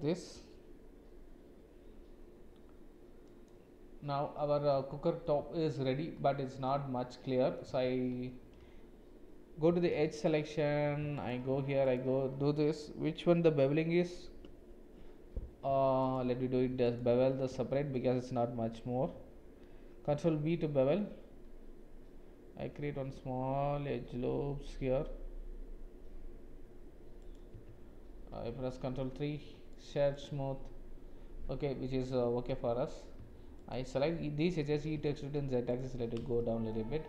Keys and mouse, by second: 4.3 click, 4.7 Tab, 5.3 click, 6.2 click, 7.3 click, 7.6 Tab, 9.7 2, 17.7 shift+click, 20.1 ctrl+b, 27.6 Tab, 28.9 ctrl+3, 32.5 Tab, 33.6 alt+click, 34.7 e, 35.8 Tab, 36.4-36.7 shift+drag.